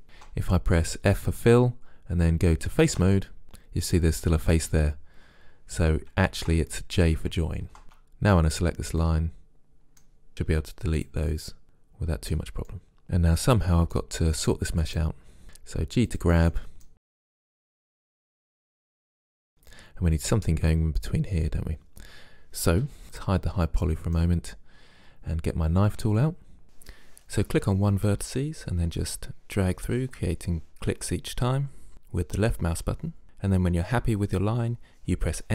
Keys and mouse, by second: 0.2 ctrl+z, 1.2 f, 2.9 ctrl+Tab, 6.5 ctrl+z, 7.8 middle click, 7.9 click, 8.5 middle click, 9.5 middle click, 10.3 Delete, 11.6 click, 14.9 right click, 15.4 g, 16.2 click, 16.5 middle click, 17.2 g, 17.5-19.1 drag, 17.5 g, 18.5 right click, 18.6 g, 19.3-20.7 drag, 23.9-25.0 drag, 26.1 k, 31.7-33.7 middle drag, 33.8-35.5 drag, 34.8-35.5 right drag.